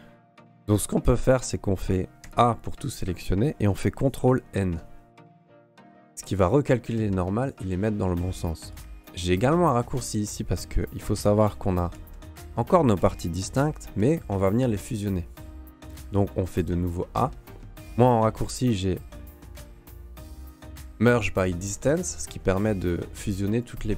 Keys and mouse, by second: 2.2 a, 4.6 ctrl+n, 8.4 middle click, 10.8 right click, 11.9 l, 13.2 a, 13.8 l, 16.4 a, 17.9 q.